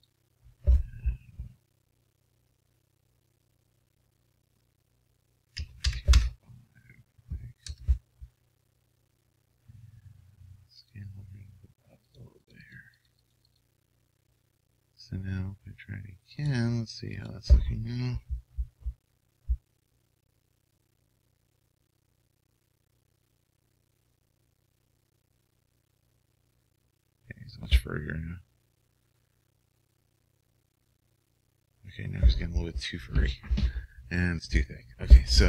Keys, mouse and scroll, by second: 0.3-1.9 drag, 10.8-18.7 drag.